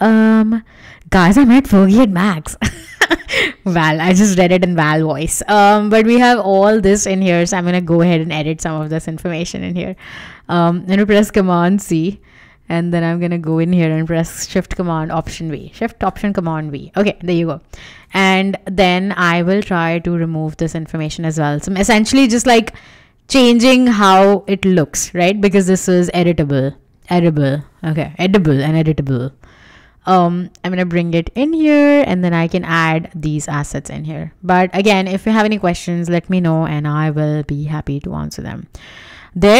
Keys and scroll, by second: 11.8 super+c, 16.2 alt+shift+super+v, 21.6 BackSpace, 28.2 BackSpace, 36.3 BackSpace.